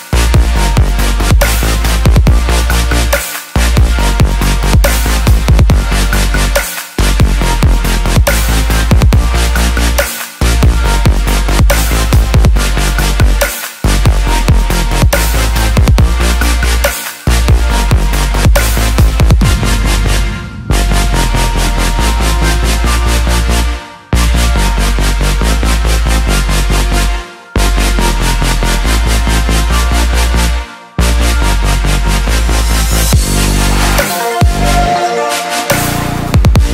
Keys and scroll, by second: 3.4 ctrl+=, 17.3-22.1 typing, 27.9 ctrl+t.